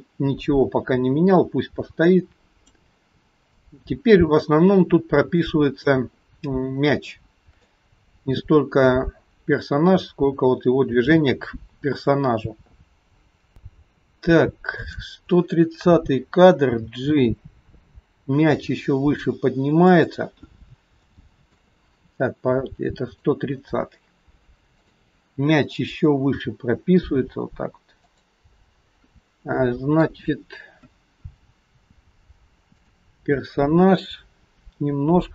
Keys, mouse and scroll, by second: 3.6 shift+middle click, 4.7-5.2 scroll up 3, 5.5 shift+middle click, 6.6-7.0 scroll down 3, 7.1 shift+middle click, 14.8 click, 16.8 g, 20.6-21.1 scroll up 3, 21.1 shift+middle click, 23.2 click, 24.8 click, 26.4 g, 29.1-29.6 scroll up 2, 29.7 shift+middle click, 32.8 click.